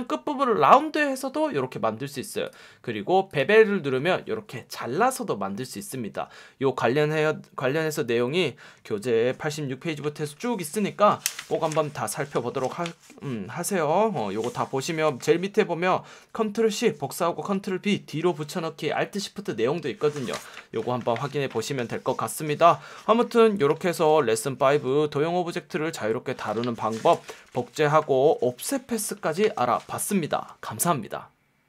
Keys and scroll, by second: 6.1 F1.